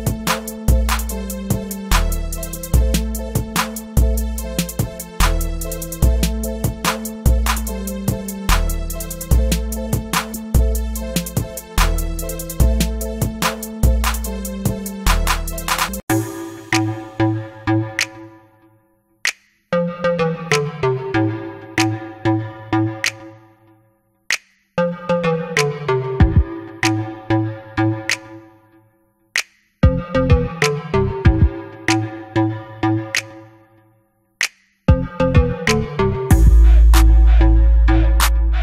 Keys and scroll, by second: 1.3-3.8 typing, 12.6 ], 16.1 b, 16.6 ], 17.1 [, 17.3 [, 21.3 ctrl+z, 22.0 ctrl+z, 23.6 ctrl+z.